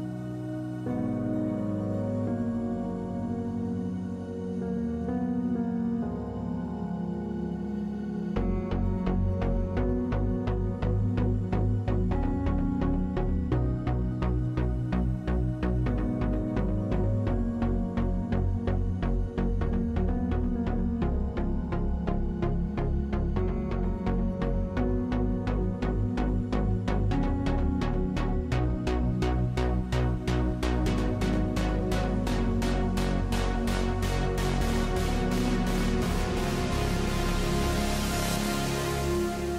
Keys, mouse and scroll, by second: 0.0 ctrl+r, 0.9 a, 1.7 ctrl+r, 2.9 KP_Divide, 5.3 Tab, 8.3 KP_7, 9.2 Tab, 10.5 Tab, 11.6 ctrl+Tab, 12.6 alt+q, 19.5 a, 19.8 ctrl+r, 20.6 ctrl+r, 21.4 ctrl+Tab, 22.0 z, 23.6 r, 24.7 ctrl+z, 25.0 w, 26.2 ctrl+z, 27.9 w, 32.0 z, 32.9 a, 33.1 Tab, 36.0 ctrl+3, 37.6-39.2 middle drag.